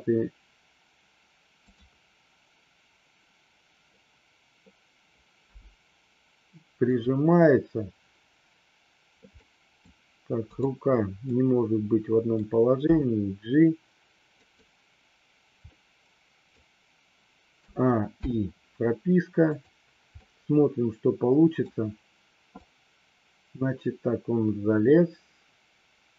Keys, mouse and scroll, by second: 5.4 g, 6.8 click, 9.4-9.8 middle drag, 10.5 click, 11.3-12.3 middle drag, 12.9 g, 14.3 click, 15.7-16.5 middle drag, 17.7 a, 18.2 i, 19.4 click, 20.2-21.5 middle drag, 22.5-26.1 drag.